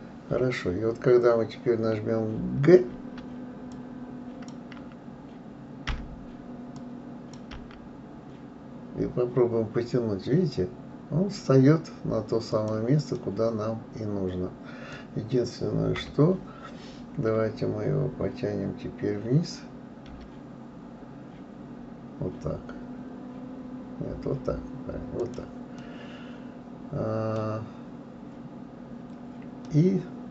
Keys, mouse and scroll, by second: 2.9 g, 5.9 g, 13.1-16.0 middle drag, 16.0 KP_3, 20.1 g, 25.8-28.8 middle drag, 29.6-30.3 middle drag.